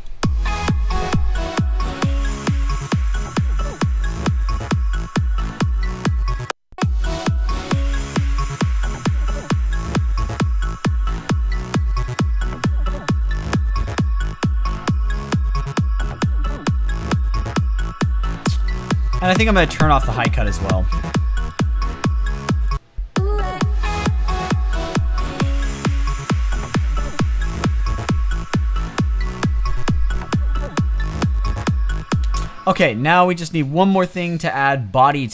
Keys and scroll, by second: 32.0 space.